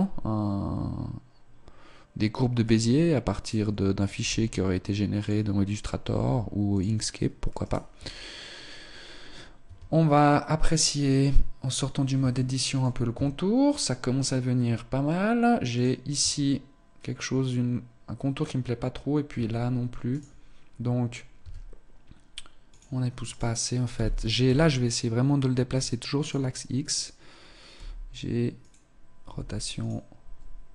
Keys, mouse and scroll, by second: 3.4 right click, 4.1 s, 5.2 click, 6.0 g, 7.6 right click, 9.3 scroll down 2, 9.4 Tab, 12.3 shift+middle click, 12.8 Tab, 15.7 right click, 16.2 Tab, 19.0 Tab, 20.0 right click, 20.6 scroll up 2, 21.2 s, 23.2 right click, 23.9 g, 26.3 right click, 27.7 g, 29.2 r.